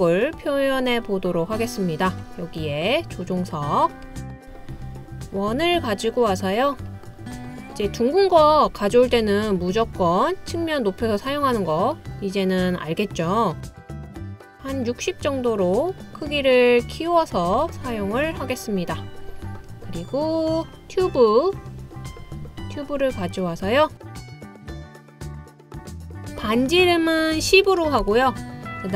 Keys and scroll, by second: 27.4-28.0 typing.